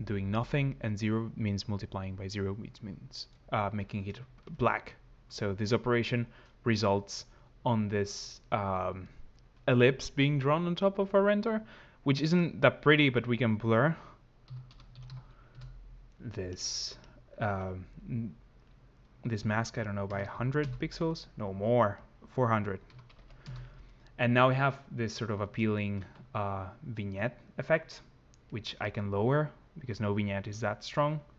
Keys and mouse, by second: 12.2 click, 16.9 click, 18.5 click, 20.1 0, 21.9 click, 23.0 0, 28.3 click.